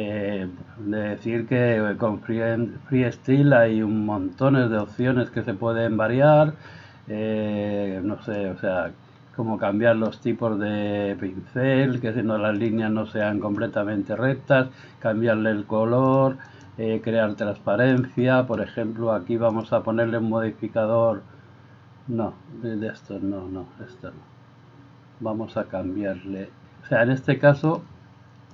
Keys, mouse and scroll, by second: 5.0 click, 8.4-27.8 drag.